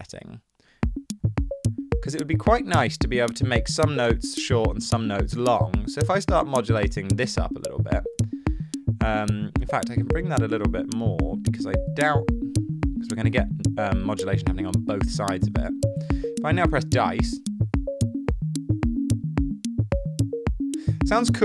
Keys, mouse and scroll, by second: 1.0 space.